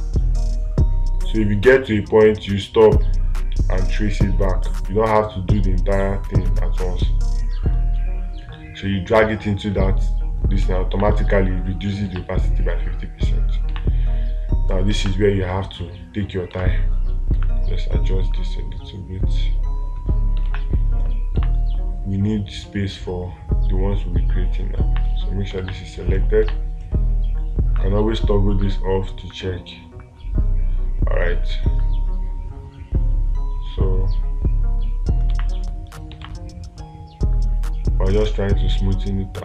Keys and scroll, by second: 12.6 space, 15.5 space, 20.9 space, 26.0 space, 35.7 space, 36.7 space.